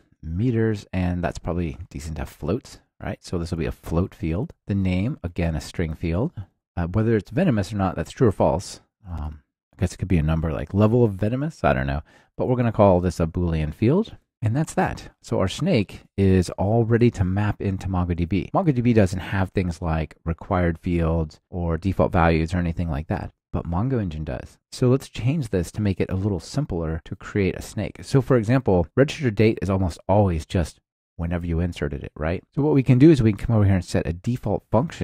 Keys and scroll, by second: 4.1 Return, 4.5 ctrl+alt+shift+Left, 4.9 super+v, 6.1 Return, 6.6 ctrl+alt+shift+Left, 8.8 alt+shift+Left, 9.2 super+v, 13.7 Return, 18.3 alt+super+l.